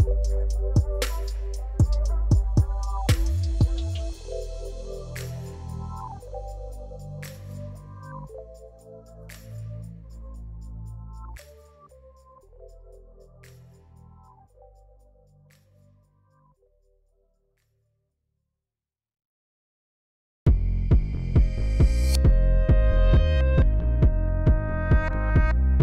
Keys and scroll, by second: 3.2 Tab, 3.8 shift+z, 4.4 c, 8.1 Return, 8.5 shift+z, 9.1 g, 9.2 z, 12.5 Tab, 15.5 Tab, 16.1 c, 17.1 Return, 17.2 g, 17.4 z, 18.5 Tab, 20.8 shift+d, 20.9 x, 22.1 1, 22.2 Return, 23.1 alt+r, 23.7 y.